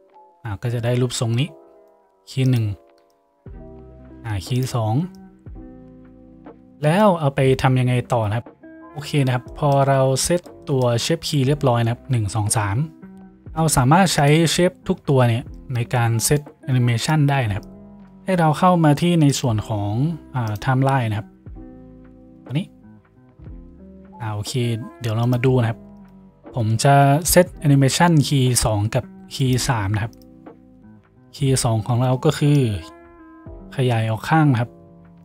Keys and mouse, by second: 2.7 middle click, 3.1-4.7 drag, 4.7 middle click, 5.3-8.5 drag, 8.5-13.3 middle drag, 13.3-14.3 drag, 14.3-15.7 middle drag, 15.7-17.1 drag, 17.1 middle click, 17.7 click, 18.5 middle click, 19.9 click, 22.5-25.3 drag, 25.3 middle click, 26.1 click, 26.3-32.7 middle drag, 32.7-35.2 drag.